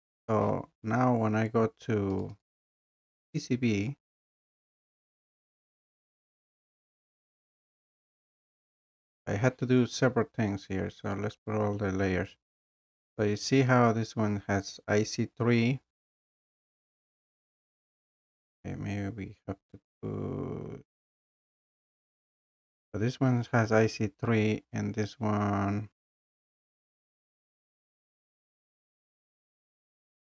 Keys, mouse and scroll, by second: 2.2-4.4 drag, 13.1 scroll, 13.7 scroll, 15.1 scroll down 1, 15.4 scroll down 2, 16.2 scroll, 18.7 scroll, 20.4 scroll up 2, 24.1 scroll down 1, 24.9 scroll up 1, 25.6 click, 25.8 scroll down 1, 27.2 click.